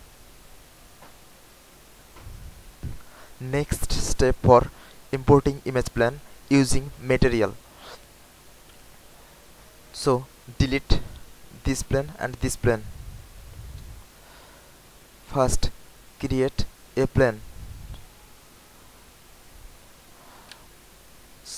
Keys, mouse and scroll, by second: 0.2 alt+right click, 0.8 alt+click, 10.1 click, 11.6 click, 11.9 Delete, 18.8 alt+click, 21.2 click.